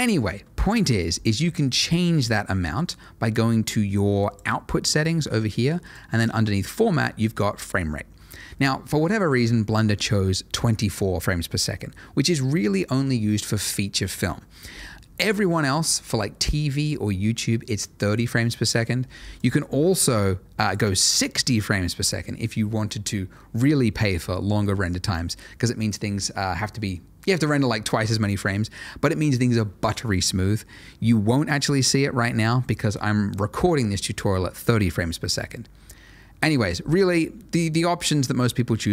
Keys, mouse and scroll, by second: 4.2 click, 6.1 double click, 19.3 click, 37.5 click.